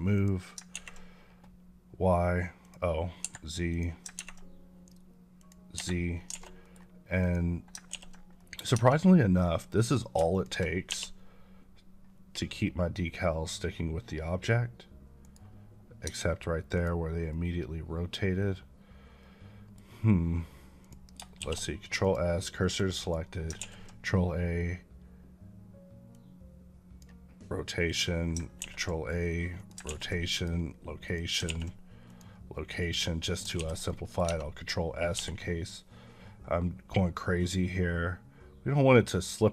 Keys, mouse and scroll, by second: 0.0 click, 2.5 click, 3.1 Escape, 3.6 click, 5.3 click, 5.6 Escape, 6.2 alt+a, 6.5 middle click, 7.1 click, 7.8 ctrl+s, 8.5 middle click, 8.6 Tab, 9.7 click, 10.2 shift+click, 10.8 g, 15.1 right click, 15.9 Tab, 16.6 click, 17.2-19.7 middle drag, 20.7 click, 21.3 shift+s, 21.9 click, 22.5 middle click, 22.9 click, 23.5 ctrl+a, 26.0 click, 28.5 ctrl+a, 29.4 click, 29.7 ctrl+a, 30.2 click, 31.5 a, 32.0 click, 33.1 middle click, 33.7 s, 33.7 middle click, 34.1 Tab, 35.1 g, 37.0-39.5 middle drag.